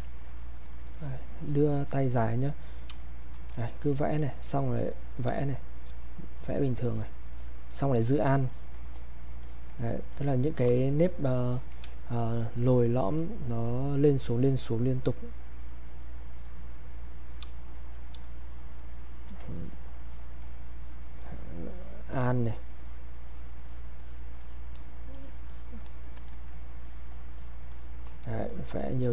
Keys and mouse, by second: 0.0 ctrl+right click, 0.4 click, 1.4 click, 2.9 space, 3.2 click, 4.7 click, 5.3 space, 5.7 click, 5.8 space, 6.3 click, 8.1 alt+click, 8.9 click, 9.4 alt+click, 10.6 click, 11.9 space, 12.3 click, 12.3 space, 12.6 click, 16.0 click, 17.5 space, 17.8 click, 18.2 space, 18.6 click, 18.7 space, 19.5 alt+click, 21.8 alt+click, 22.8 click, 26.3 alt+click, 26.8 alt+click.